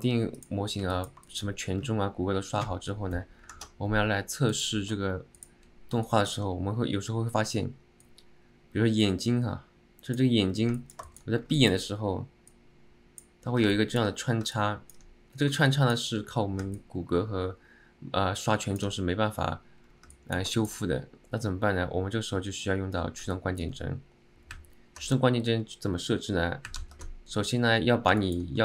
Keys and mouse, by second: 1.0 alt+middle click, 1.4 shift+middle drag, 5.5-5.9 drag, 6.2 alt+middle click, 8.2-10.4 drag, 10.9 alt+middle click, 11.2 shift+middle click, 11.7 alt+middle click, 12.7-13.4 drag, 13.8 alt+middle click, 14.6-15.1 alt+middle drag, 15.8 alt+middle drag, 16.8-18.9 alt+middle drag, 20.3 alt+middle click, 20.7 shift+middle click, 23.5 alt+middle click, 28.3 alt+middle drag.